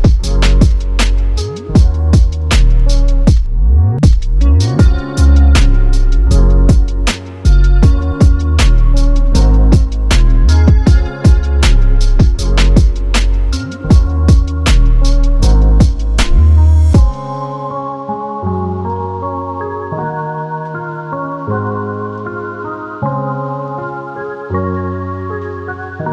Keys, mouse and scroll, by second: 2.6 click, 7.5 click, 9.4 click, 13.1 click, 17.9 ctrl+click, 18.8 p, 19.8 click, 25.2 click.